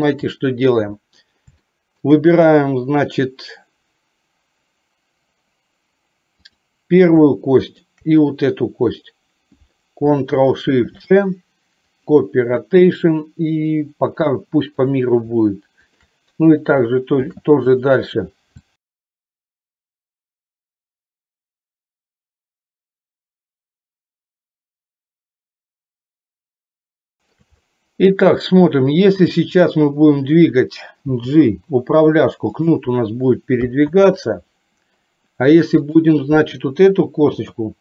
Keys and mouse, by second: 1.7 shift+middle click, 7.7 shift+click, 14.8 click, 18.7 ctrl+shift+middle click, 19.0 click, 19.7 ctrl+shift+click, 20.3 ctrl+shift+click, 20.9 ctrl+shift+middle click, 21.3 shift+click, 21.9 ctrl+shift+click, 23.1 ctrl+shift+click, 23.7 ctrl+shift+middle click, 24.4 ctrl+shift+click, 24.9 ctrl+shift+click, 26.0 ctrl+shift+click, 26.7 ctrl+shift+click, 31.2 g, 33.9 ctrl+z, 35.8 click, 37.6 r.